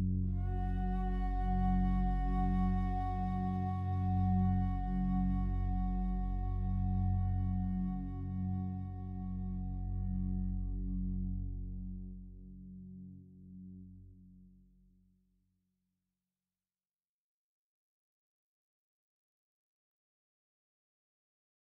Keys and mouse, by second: 0.1 alt+click, 1.1 click, 1.6-2.7 drag, 2.7 ctrl+s, 3.0 alt+a, 3.3-5.0 alt+drag, 5.0 1, 5.5 alt+shift+click, 6.0 ctrl+alt+click, 9.3 click, 11.7 super+d, 11.7-12.7 drag, 13.7-21.8 drag.